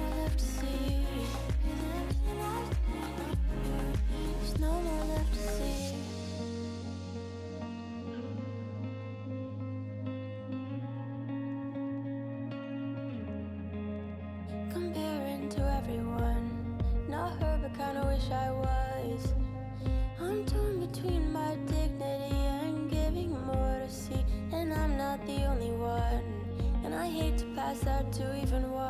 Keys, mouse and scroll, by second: 1.4 click, 2.2-3.5 middle drag, 3.5 click, 4.2-5.8 scroll down 5, 5.9 click, 9.9 click, 12.2 scroll up 3, 13.1-14.4 ctrl+middle drag, 14.4-14.9 scroll down 3, 14.9 middle click, 15.5-15.8 scroll up 3, 16.3 scroll up 2, 16.7-18.1 shift+middle drag, 18.1 s, 21.5 click, 22.9-26.0 middle drag, 26.3 click.